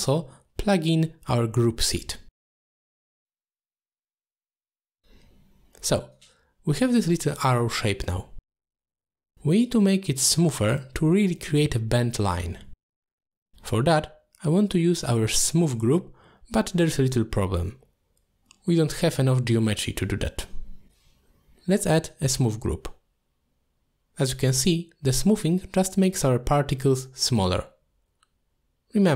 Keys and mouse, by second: 3.7-4.7 drag, 5.2 middle click, 5.5 click, 5.9 middle click, 7.5 click, 7.7 click, 7.8 click, 8.0 click, 8.2 click, 8.3 click, 9.4 click, 9.5 click, 9.7 click, 10.9-12.6 shift+drag, 12.9 middle drag, 13.9 middle click, 14.9 middle click, 15.6 middle click, 17.1 middle click, 17.9 middle click, 18.4 shift+middle drag, 19.3 shift+a, 20.9 o, 22.8 click, 24.6 click, 24.8 click, 24.9 click, 25.1 click, 25.2 click, 25.4 click, 25.6 click, 25.7 click, 26.5 click, 26.9 click, 27.2 click, 28.2 click, 28.5 click.